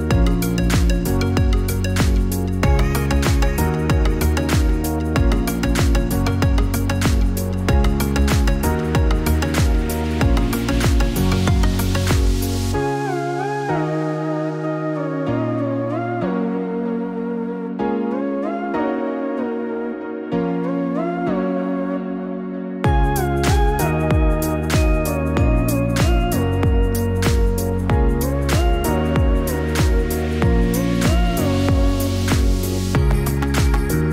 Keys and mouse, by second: 1.0 KP_6, 4.4 click, 11.9 click, 12.9 click, 19.6 click, 25.7-31.7 drag.